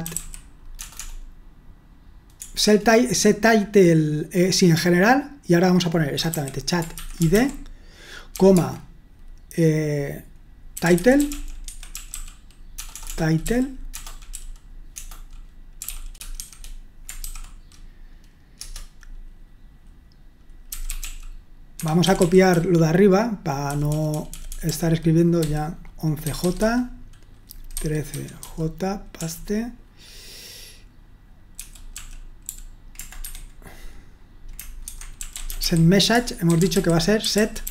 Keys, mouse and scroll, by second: 0.0-1.0 typing, 2.4 typing, 6.1-8.6 typing, 10.5-17.2 typing, 18.6 Return, 20.7-23.9 typing, 21.7 Escape, 25.2-29.2 typing, 31.7-32.4 typing, 33.2 Escape, 34.9-37.7 typing.